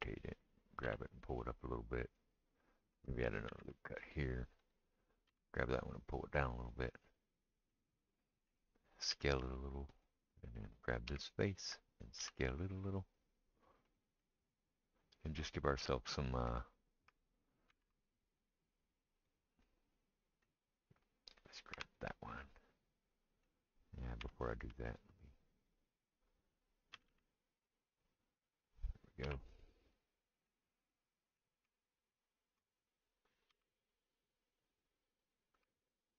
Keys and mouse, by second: 0.8 g, 3.5 ctrl+r, 5.3 g, 9.1 s, 11.1 3, 11.2 click, 11.3-29.4 middle drag, 12.2 s, 17.7 ctrl+r, 19.2 click, 21.8 3, 21.8 click, 24.2 2, 26.9 g, 29.2 3, 29.4 click, 29.5-32.0 middle drag, 32.0 ctrl+right click, 32.1-36.1 ctrl+middle drag, 33.6 s.